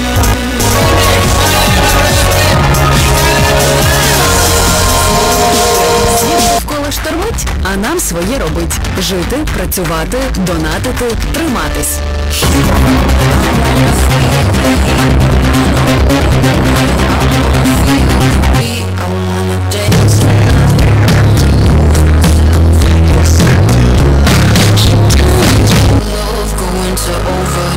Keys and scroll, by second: 6.6 Page_Down, 19.2 Page_Down, 26.4 Page_Down.